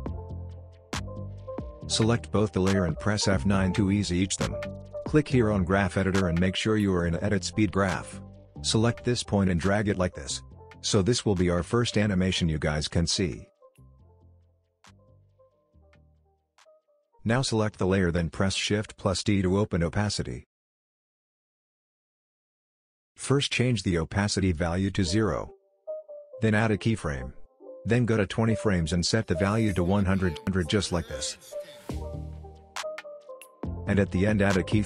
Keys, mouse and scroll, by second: 0.1-1.1 click, 2.2 F9, 4.8 click, 6.0 right click, 8.2-11.5 drag, 12.2 space, 14.5 space, 14.8 click, 14.9 space, 16.7 space, 16.8 click, 18.8 shift+t, 21.4-22.3 drag.